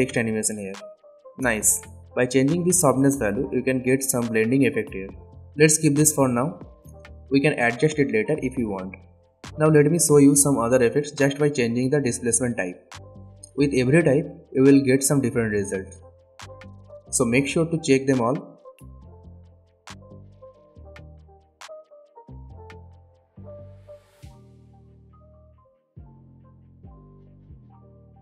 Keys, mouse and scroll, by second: 0.5-1.2 scroll up 1, 1.2-2.2 drag, 3.3-6.1 drag, 9.8 space, 11.0 click, 17.2-20.7 drag.